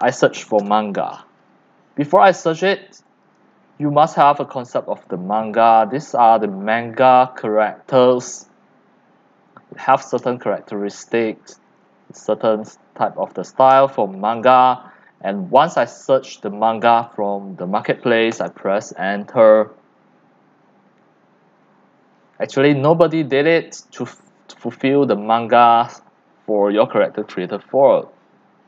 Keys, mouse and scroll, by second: 0.0 click, 0.3-2.2 typing, 3.2 click, 4.0-8.3 scroll down 21, 8.9 scroll down 2, 10.2-15.3 scroll down 14, 15.3-16.4 drag, 17.0 click, 18.3 Return, 21.0-22.2 scroll down 5, 22.2-24.7 scroll up 5, 24.8 click, 25.6-27.1 scroll down 6, 27.1-28.0 scroll down 13, 28.1 scroll up 11, 28.2-28.6 scroll down 2.